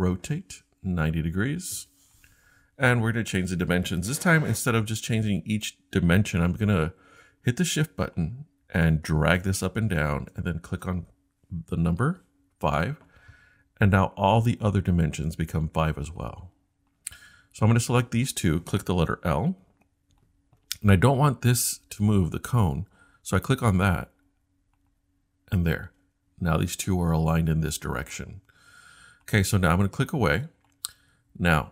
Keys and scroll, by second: 12.0 5, 12.6 Return, 19.7 i.